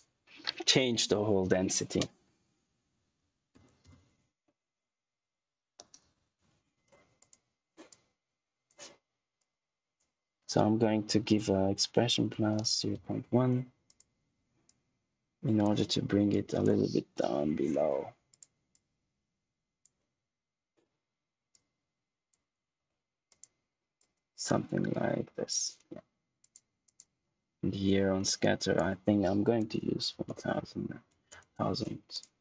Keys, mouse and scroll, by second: 3.2-4.4 typing, 5.7 space, 6.3 1, 7.1 click, 12.4-13.5 typing, 13.8 click, 22.7 2, 23.2 click, 32.0 click.